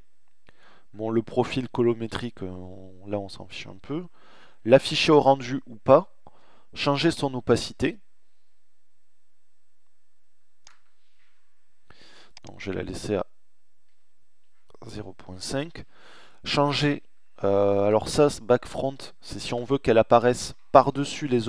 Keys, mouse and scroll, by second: 6.1-11.2 middle drag, 11.2-13.1 middle drag.